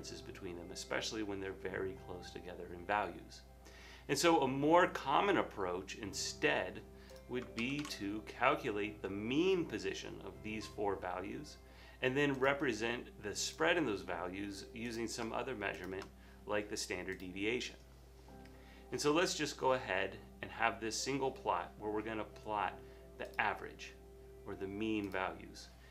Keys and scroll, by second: 7.7 super+c, 8.0 super+v.